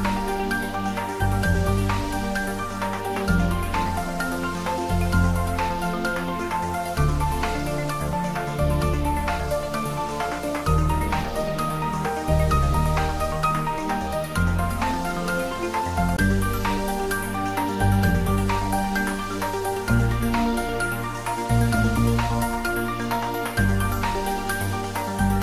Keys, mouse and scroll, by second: 5.5-6.1 scroll up 1, 6.7-7.0 scroll down 1, 8.2 click, 24.0 click.